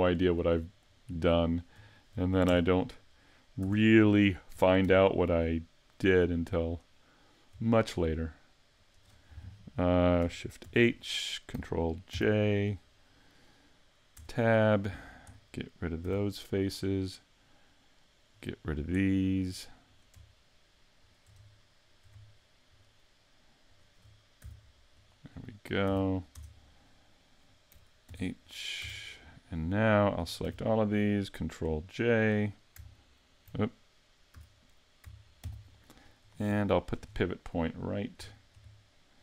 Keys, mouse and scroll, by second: 0.1 shift+middle click, 1.1 middle click, 1.9 shift+middle click, 2.5 Tab, 2.7-3.2 scroll down 4, 3.2 middle click, 3.6 a, 4.8 alt+h, 5.4 scroll up 3, 6.6 right click, 7.8 shift+right click, 8.8 right click, 10.6 shift+h, 12.1 ctrl+j, 14.2 Tab, 14.5 middle click, 15.3-15.6 scroll down 2, 16.0 x, 17.0 middle click, 19.0 shift+middle click, 19.9 right click, 21.0 shift+right click, 21.5 shift+middle click, 22.7 shift+right click, 23.7 shift+right click, 24.4 x, 25.3-25.9 scroll down 5, 25.9 a, 26.3 Tab, 26.9 middle click, 28.1 alt+h, 28.4-28.8 scroll up 4, 28.8 a, 29.4 right click, 30.2 scroll down 2, 30.4 a, 35.4 ctrl+j, 36.2-36.6 scroll up 1, 36.6 shift+middle click, 37.1-37.5 scroll up 6, 37.5 middle click, 38.3 shift+middle click, 38.7 middle click.